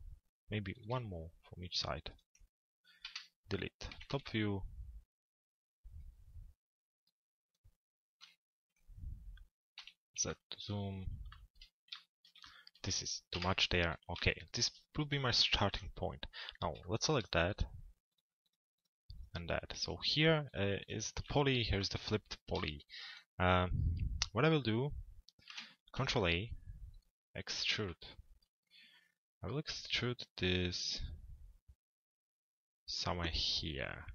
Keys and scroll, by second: 3.6 t, 4.1 z, 8.0 p, 9.8 z, 13.3 Delete, 25.0 ctrl+a.